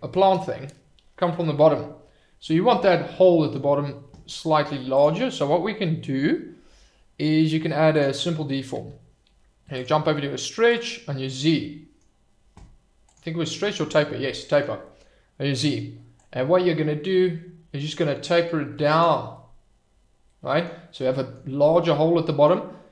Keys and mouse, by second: 2.7-3.5 middle drag, 4.9-8.2 drag, 9.8 click, 10.7 click, 11.6-12.0 middle drag, 13.1 click, 14.5 middle drag, 14.8 middle click, 16.3-19.1 drag, 19.3-20.6 middle drag, 21.0-21.3 middle drag, 21.9-22.4 middle drag.